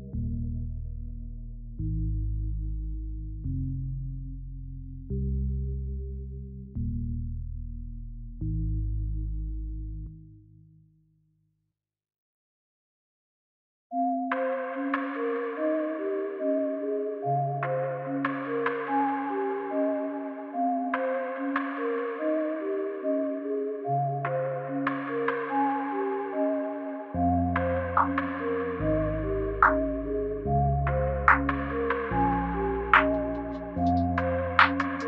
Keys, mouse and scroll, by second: 4.4 click, 6.6 click, 8.5 space, 11.8 space, 13.1 click, 14.3 s, 17.1 click, 18.2 s, 21.1 click, 21.1 s, 24.6 click, 25.5 s, 28.3 space.